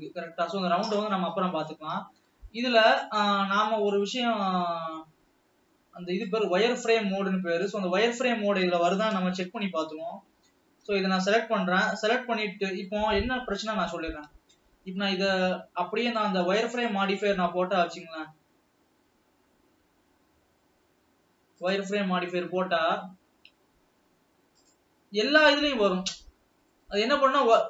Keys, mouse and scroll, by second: 1.4-3.6 middle drag, 3.6 ctrl+s, 3.8-6.7 ctrl+middle drag, 6.7 click, 10.1 alt+a, 12.0 l, 14.8 Tab, 16.5 drag, 25.1-26.1 drag, 26.1-26.8 scroll down 5, 27.0-27.6 middle drag.